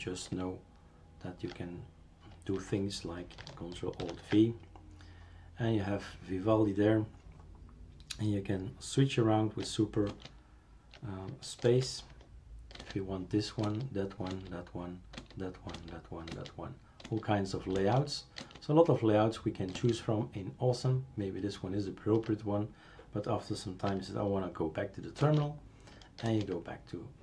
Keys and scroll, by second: 0.3 super+space, 4.0 ctrl+alt+v, 10.1 super+space, 11.6 super+space, 12.8 super+space, 13.6 super+space, 14.3 super+space, 15.2 super+space, 15.7 super+space, 16.3 super+space, 17.0 super+space, 17.7 super+space, 18.4 super+space, 19.7 super+space, 25.2 super+space, 26.2 super+space.